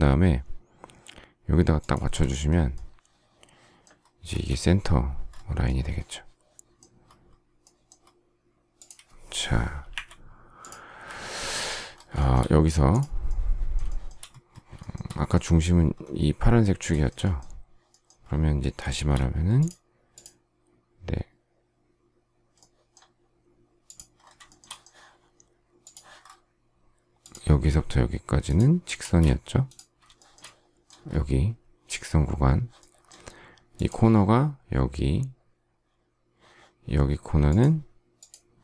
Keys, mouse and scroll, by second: 1.7 shift+click, 4.2 space, 9.9 Delete, 12.1 shift+middle click, 13.8 shift+middle click, 14.8 shift+middle click, 16.9 shift+middle click, 18.9 shift+x, 24.4 shift+middle click, 29.0 space, 30.1 shift+middle click.